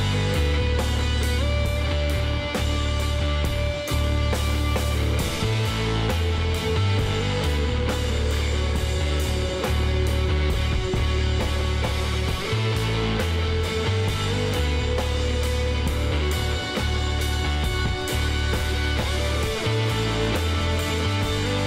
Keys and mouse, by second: 4.4 s, 5.8 e, 7.4-9.1 drag, 12.1-13.9 middle drag, 14.1 f, 14.4 middle click, 16.7 e, 20.6 e.